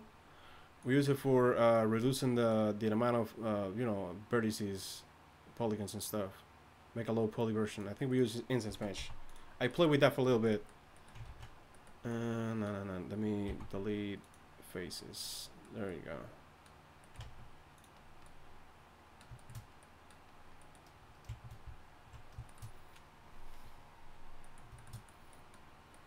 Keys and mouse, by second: 8.6 z, 9.0 x, 11.2 ctrl+z, 13.4 x, 17.2 ctrl+Tab.